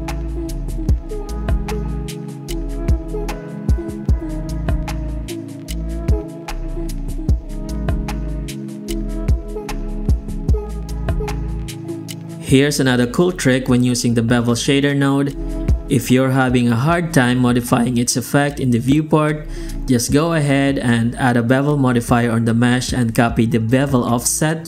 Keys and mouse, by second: 0.0 click, 1.2 middle click, 2.0 z, 3.0 alt+click, 4.6 click, 4.9 alt+shift+z, 5.7-6.1 shift+middle drag, 6.4 ctrl+b, 6.8 click, 7.3 z, 8.5 middle click, 9.8 z, 10.6 middle drag, 11.7 g, 13.0 ctrl+shift+x, 23.0 KP_0.